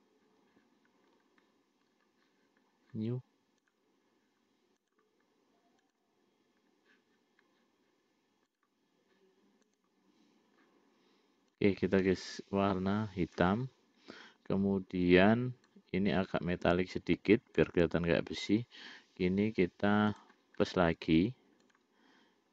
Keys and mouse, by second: 6.5 click, 8.8 click, 10.0 click, 16.0-18.2 drag, 20.4 click, 22.1 click.